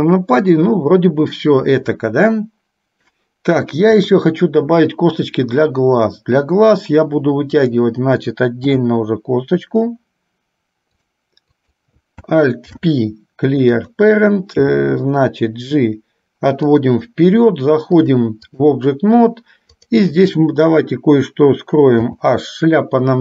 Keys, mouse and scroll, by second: 4.1 KP_3, 7.7 click, 8.8 e, 11.6 click, 12.8 alt+p, 14.7 g, 18.0 click, 19.8 click, 22.1 h.